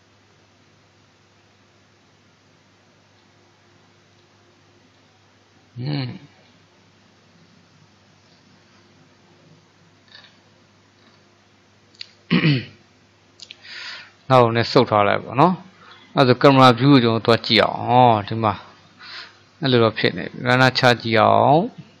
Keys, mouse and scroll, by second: 4.1 click, 8.3-10.2 middle drag, 10.2-11.0 scroll down 1, 11.0-11.5 scroll down 4, 11.5-12.5 middle drag, 12.5-13.6 scroll up 2, 13.6 click, 14.8-15.9 middle drag, 15.9 click, 20.9-22.0 drag.